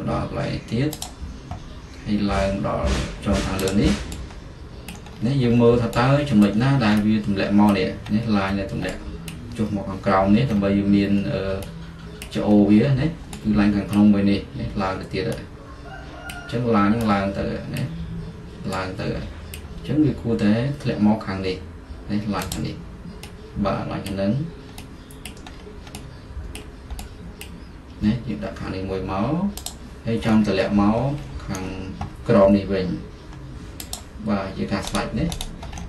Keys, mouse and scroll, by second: 1.1-3.3 drag, 3.8-5.2 drag, 5.2-16.2 middle drag, 10.6-11.2 scroll down 2, 11.2-11.8 scroll down 1, 12.6-13.4 scroll down 2, 13.4-14.0 scroll down 1, 14.0-15.0 scroll down 1, 15.0-16.1 scroll down 1, 16.4-21.8 middle drag, 22.6-25.8 drag, 25.8-29.7 middle drag, 29.7 click, 30.5-33.8 middle drag, 31.2-33.7 scroll, 34.0 click, 34.6 middle click, 35.0 right click.